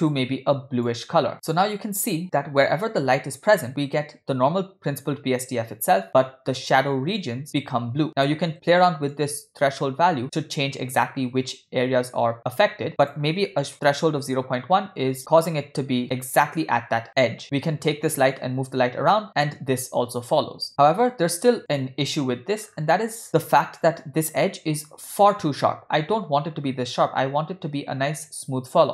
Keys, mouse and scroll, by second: 8.2 middle click, 8.5 scroll up 1, 9.1-12.9 shift+drag, 13.0-14.3 shift+drag, 15.2-16.0 scroll up 5, 16.0-16.5 scroll down 4, 17.4 click, 18.4 g, 22.5 scroll up 3, 22.8 scroll down 1, 22.9-24.6 scroll up 3, 26.1-28.5 scroll down 3.